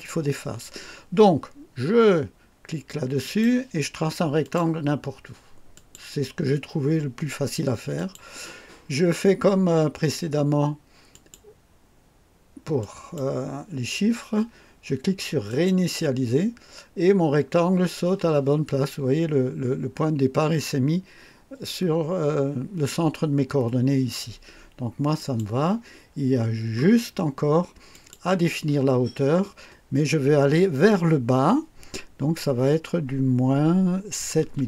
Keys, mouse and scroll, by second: 3.2 click, 4.4 click, 5.7 click, 7.9 click, 11.1 click, 12.7 click, 15.4 click, 25.1 click, 27.9 click, 32.1 KP_Subtract, 34.4 KP_7.